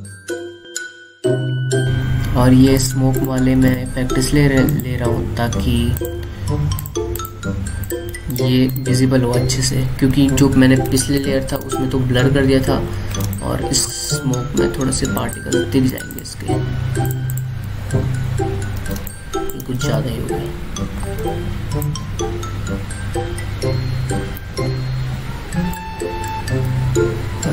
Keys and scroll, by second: 2.4 F7, 11.7 alt+space, 12.6 alt+space, 14.0 alt+space, 19.7 alt+space, 20.6 alt+space.